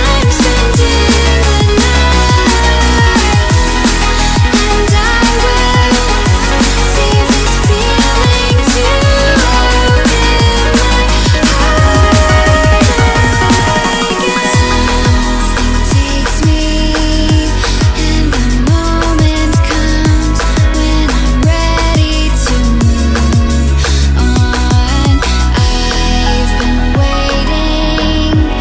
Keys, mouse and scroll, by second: 2.3-2.8 scroll down 1, 2.8-5.2 middle drag, 6.0-7.8 drag, 8.4-10.6 drag, 10.6 ctrl+z, 10.8 ctrl+z, 11.0 ctrl+z, 11.8 click, 12.0-13.1 middle drag, 13.1 scroll down 1, 13.4-14.1 scroll up 3, 14.1 middle click, 14.9-15.6 scroll down 3, 15.6-17.1 middle drag, 17.1-18.4 drag, 18.4 ctrl+z, 18.6 middle click, 19.5-22.5 drag, 22.5-23.6 middle drag, 23.6 scroll up 1, 23.9 scroll down 1, 24.2-25.4 middle drag, 25.4-26.1 scroll down 3, 26.1 shift+middle click, 26.8 click, 27.3-28.6 drag.